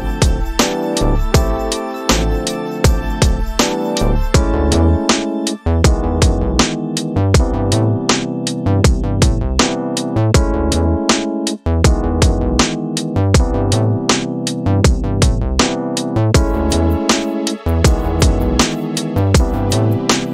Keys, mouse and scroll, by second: 13.5 click, 16.6-18.5 drag, 19.4-20.3 right drag.